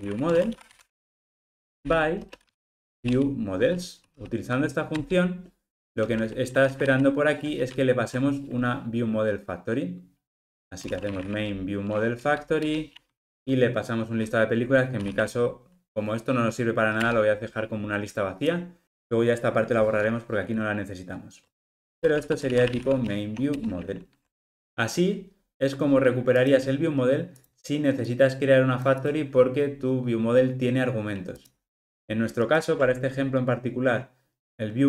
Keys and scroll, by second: 5.0 Return, 7.5 super+p, 12.6 Return, 17.0 Return, 23.6 Return, 24.5 ctrl+alt+o, 32.5 super+b.